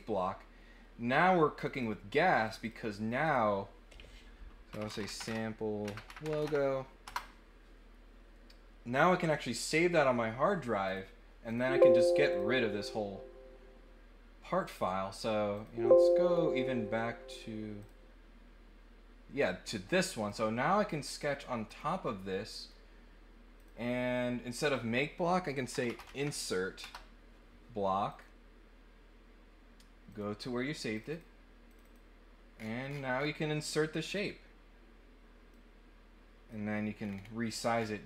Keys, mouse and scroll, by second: 1.5 click, 1.7 click, 2.4 click, 3.2 click, 10.8 click, 11.4 click, 12.3 click, 15.5 click, 17.8 click, 20.2 click, 21.6 click, 22.4 middle click, 23.5 click, 24.5 click, 28.1 click, 30.0 click, 30.9 click, 31.1 click, 31.6 click, 32.5-33.2 scroll down 3, 35.5-36.5 drag, 37.0 scroll down 1, 37.4-38.0 scroll up 3.